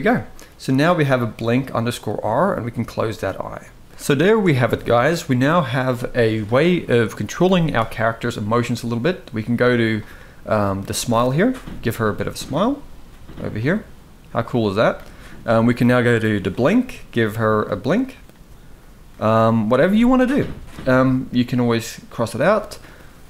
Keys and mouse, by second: 1.7 click, 3.8 shift+middle click, 9.6 drag, 10.6 shift+middle click, 11.6 click, 13.4-14.7 drag, 16.9 click, 18.5 click.